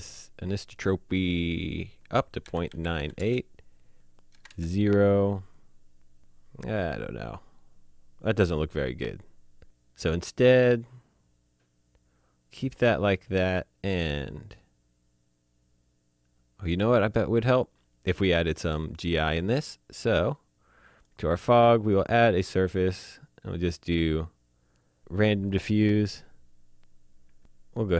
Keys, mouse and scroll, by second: 1.5 click, 2.4 KP_Decimal, 2.5 KP_9, 2.6 KP_8, 2.6 KP_Enter, 3.5 click, 4.1 KP_0, 4.1 KP_Enter, 17.5 click, 20.9 click, 25.5 click, 27.2 ctrl+Num_Lock, 27.4 ctrl+z, 27.4-27.9 scroll down 1.